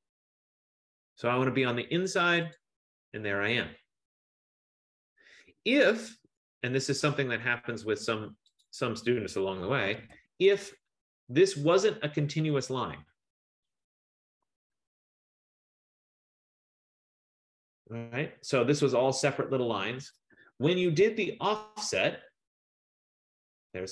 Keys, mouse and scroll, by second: 2.6 click, 6.3 Return, 6.5-7.8 drag, 8.7 click, 9.5-11.4 typing, 12.7 click, 13.3-17.9 typing, 18.9 click, 19.5 click, 20.0 F15, 20.5 Escape, 23.6 click.